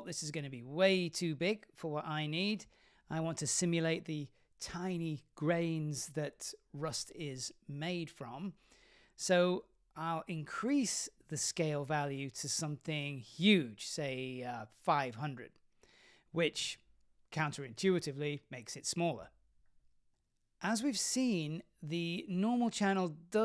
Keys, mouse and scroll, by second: 0.0 click, 0.9-3.4 scroll down 10, 12.2-15.7 drag, 16.4 click, 18.5 scroll down 5, 18.7-19.9 middle drag, 20.2-21.0 scroll up 4.